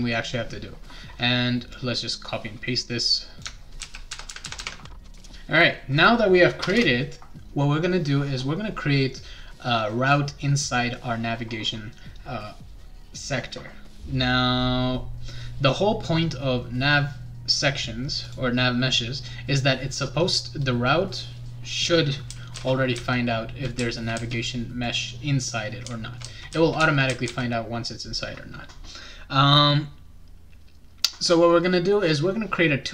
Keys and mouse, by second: 1.7-3.4 drag, 3.8 ctrl+c, 4.1 ctrl+v, 4.3 ctrl+v, 4.4 ctrl+v, 4.6 ctrl+v, 4.8-5.7 typing, 5.0 click, 5.1 click, 5.2 click, 5.3 click, 6.6 Return, 6.7 Return, 18.2 click, 20.8-24.8 right drag, 22.0-24.1 typing, 25.5-31.2 right drag, 25.6-27.8 typing.